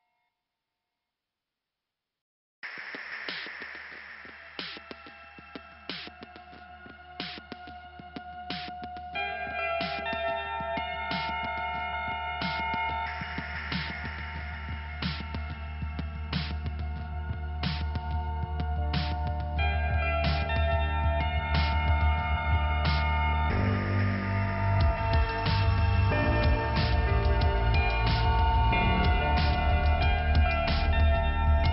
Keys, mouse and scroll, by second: 0.8 click, 1.5 click, 2.2 click, 3.1 click, 4.9-6.2 scroll down 2, 6.6-7.3 scroll up 1, 7.3 click, 8.5 click, 12.5-13.2 scroll up 1, 13.2 click, 13.7 click, 14.8 click, 16.1 scroll up 1, 18.3 click, 19.8 scroll down 1, 24.3 click, 25.1 middle click, 26.2 click, 29.6 click, 30.5 middle click.